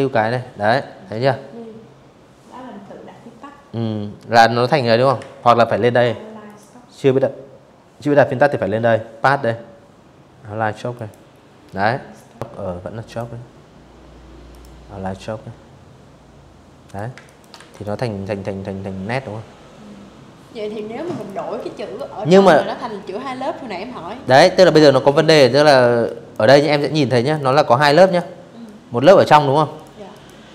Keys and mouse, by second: 2.9 ctrl+z, 4.1 click, 8.6 click, 14.5 click, 14.8 space, 14.9 click, 15.2 v, 15.4 click, 18.8 click, 19.2 click, 22.3 click, 22.9 click, 23.7 click, 24.3 ctrl+z, 24.9 click, 25.1 click, 25.7 click, 26.3 click, 27.0 ctrl+z, 27.4 click, 27.8 click, 28.9 click, 29.5 click, 29.7 click.